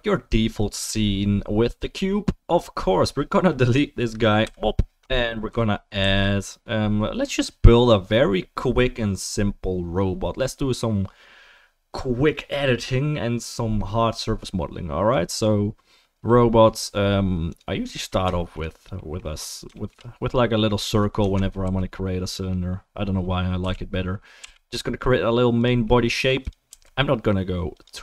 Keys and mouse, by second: 4.4 typing, 6.0 shift+a, 18.4-26.4 shift+middle drag, 21.2 Tab, 21.6 a, 23.6 f, 24.4 e, 26.2 3, 26.4 click, 26.5-28.0 middle drag, 26.7 s.